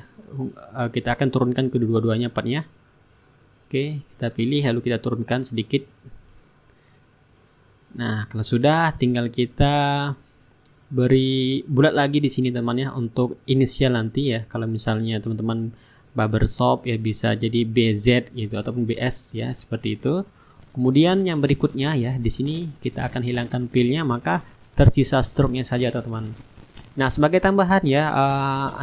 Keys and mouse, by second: 1.2-3.2 middle drag, 3.2-6.7 shift+drag, 7.0-8.5 drag, 10.2 click, 11.4-16.3 ctrl+drag, 16.7 click, 18.1-21.5 drag, 21.6-27.4 drag, 23.0-24.7 middle drag, 25.3 middle click, 28.3 click.